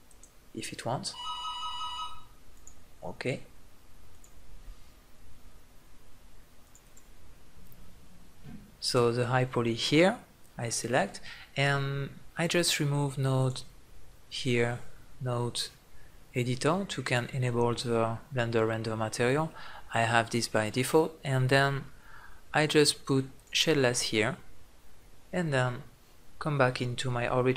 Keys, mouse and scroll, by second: 2.2 click, 3.0-5.0 drag, 9.0-10.5 drag, 13.1-15.1 drag, 23.1-25.1 drag.